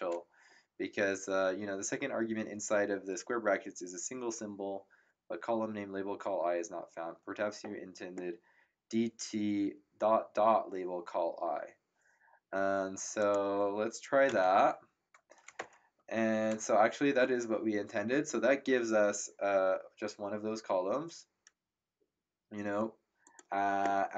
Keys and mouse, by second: 13.2 click, 14.2 typing, 15.5 ctrl+Return, 23.2 click.